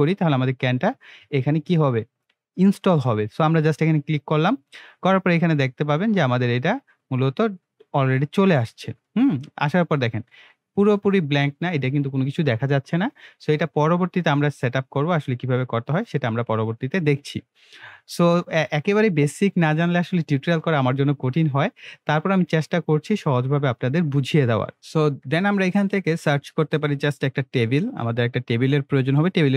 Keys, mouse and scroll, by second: 3.4 click, 6.4 scroll down 1, 6.8 scroll up 1, 7.3 scroll up 1, 8.3-9.0 scroll down 1, 9.0-10.6 middle drag, 13.9-14.4 scroll up 1, 14.4-15.4 scroll down 1, 15.4-15.8 scroll up 1, 15.8-17.2 scroll, 17.2-19.6 middle drag, 25.9 click, 27.6-29.5 typing.